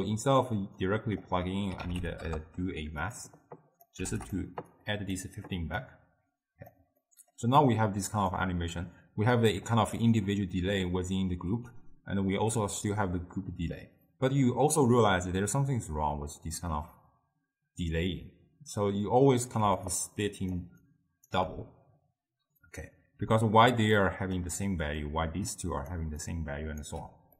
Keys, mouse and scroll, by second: 0.9 drag, 3.7 click, 4.8-7.1 drag, 7.1-8.4 middle drag, 8.4-11.5 drag, 19.7-21.5 typing, 20.0-20.6 drag, 20.9 right click, 23.3 d, 23.5 click, 24.4-25.1 d, 25.1 click, 26.0 d, 26.3 right click, 26.9 d.